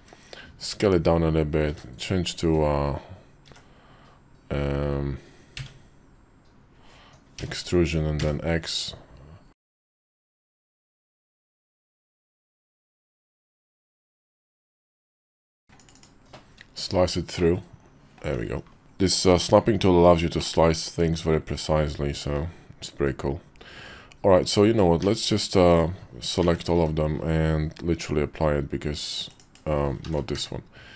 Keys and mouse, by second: 10.6-16.0 middle drag, 17.2 middle click, 18.1 `, 20.1 shift+middle click, 24.8 q, 26.2 a, 26.5 q, 29.2 click, 29.9 ctrl+z, 30.1 q.